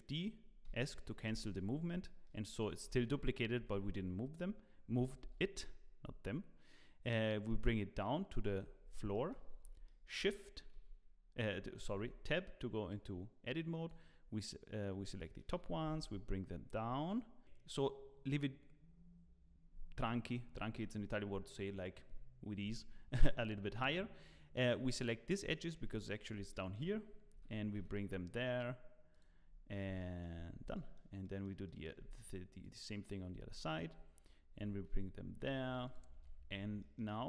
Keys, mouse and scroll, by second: 1.7 scroll up 2, 2.0 shift+middle click, 2.8 g, 4.9 g, 8.7 scroll down 3, 9.1 shift+middle click, 9.6 Tab, 9.8 shift+middle click, 10.7 1, 11.9 alt+a, 12.9 click, 15.2 shift+middle click, 15.8 g, 17.4 click, 17.4 scroll down 2, 17.7-19.2 scroll up 5, 20.4-23.1 scroll down 2, 23.1-23.4 scroll up 2, 23.8 scroll down 1, 23.9-24.7 scroll down 2, 24.7 click, 25.5 shift+middle click, 26.5 shift+middle click, 27.3 g, 29.4-29.8 scroll down 4, 30.0 shift+middle click, 30.4 scroll down 2, 30.7 shift+middle click, 31.2 shift+middle click, 31.6 shift+middle click, 32.0 scroll up 3, 32.6 click, 33.3 scroll up 2, 33.6 shift+middle click, 34.6 g, 36.1 Tab, 36.3-36.8 scroll down 5.